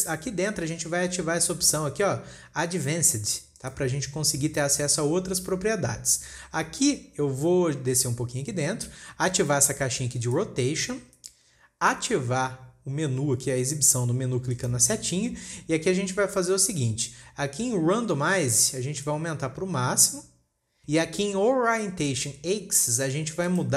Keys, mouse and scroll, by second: 0.7-1.0 scroll up 4, 4.1 click, 7.1-7.8 scroll down 1, 8.0-8.4 scroll up 2, 8.4-9.0 scroll down 3, 10.8 click, 15.0-18.0 drag, 19.5-21.4 drag.